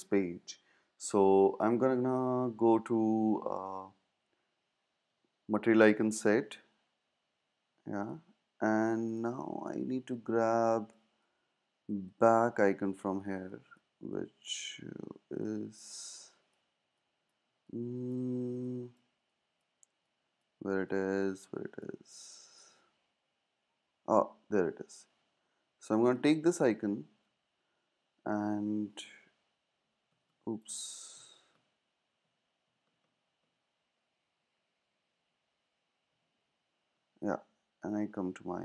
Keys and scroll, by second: 27.1 super+c, 29.1 super+Tab, 35.1 super+`.